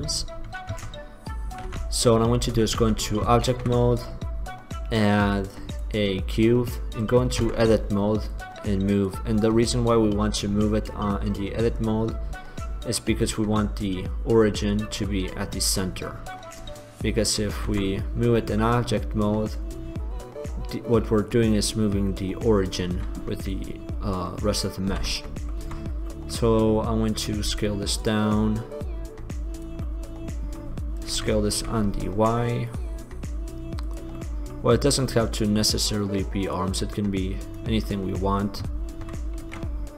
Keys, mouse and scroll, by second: 0.9 Tab, 1.9 Tab, 2.5 Tab, 3.0 Tab, 3.6 shift+a, 7.7 Tab, 8.5-10.8 drag, 13.5-16.4 middle drag, 17.9 Tab, 18.4 middle click, 18.7-21.0 middle drag, 21.6-23.7 middle drag, 25.0 ctrl+z, 25.5 click, 25.8 Tab, 27.6 s, 28.9 click, 29.3 click, 30.0 middle click, 30.4 click, 31.2-32.4 drag, 31.2 s, 34.1-35.7 drag, 35.7 middle click, 36.7 middle click, 38.1 middle click, 39.6 ctrl+b.